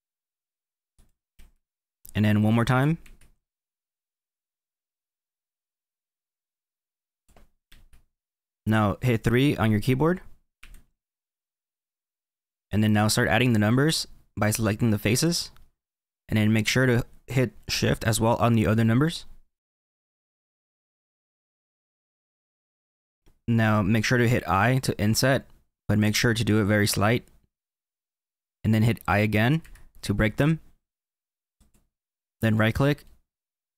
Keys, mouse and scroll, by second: 2.7 ctrl+r, 10.5 3, 11.7-12.5 scroll up 3, 12.5-15.2 middle drag, 15.2-16.5 drag, 16.5-19.6 middle drag, 19.7 shift+click, 20.0 middle click, 20.4 shift+click, 20.7 middle click, 21.0 shift+click, 21.5 middle click, 21.8-22.2 shift+Left, 22.3 middle click, 22.6-23.1 shift+Left, 33.0-33.7 middle drag.